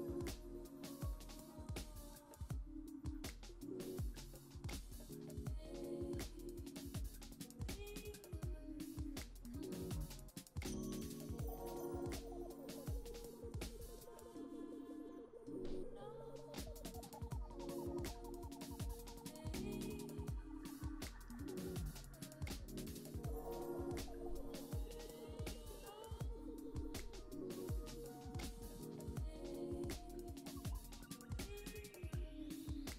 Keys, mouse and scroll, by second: 2.0 KP_3, 3.2 click, 5.0 middle click, 5.9 scroll down 1, 6.0 middle click, 7.4 click, 10.7 click, 12.1 middle click, 15.1 click, 18.0 click, 19.8 middle click, 21.2 click, 23.8 click, 26.5-27.7 middle drag, 29.1 KP_7, 29.7-30.3 scroll up 3, 30.8 KP_1, 32.4 click, 32.8 shift+middle click.